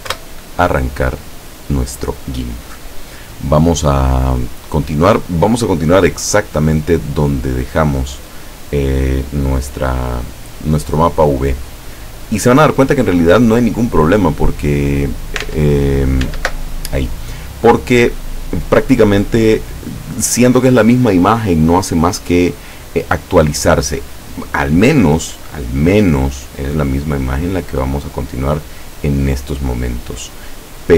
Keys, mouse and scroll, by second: 0.0-0.4 typing, 15.5 alt+Tab, 16.3 alt+Tab, 18.2 click, 30.1 click.